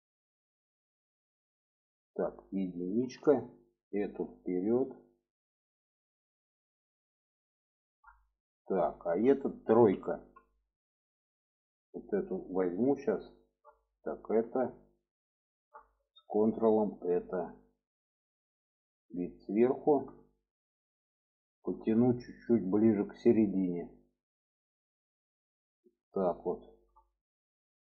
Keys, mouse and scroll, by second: 0.9 shift+middle click, 1.7 shift+middle click, 2.8 1, 3.6 click, 4.3-5.6 drag, 7.5 shift+middle click, 7.9 middle click, 8.7 shift+middle click, 9.6 2, 9.9 3, 10.7 click, 12.1 middle click, 13.6 click, 14.3 shift+middle click, 15.0 shift+middle click, 16.6 ctrl+click, 17.4-18.6 middle drag, 19.1 alt+middle click, 20.0 shift+middle click, 21.4 shift+middle click, 23.0-25.9 drag, 26.2 shift+middle click, 27.4 shift+middle click.